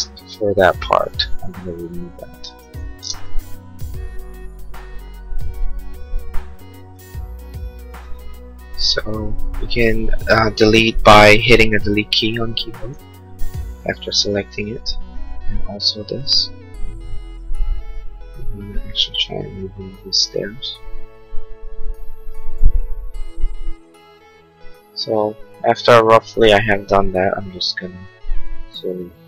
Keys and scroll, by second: 3.5 Delete, 3.8 ctrl+s, 13.1 Delete, 13.7 Delete, 23.9 Delete.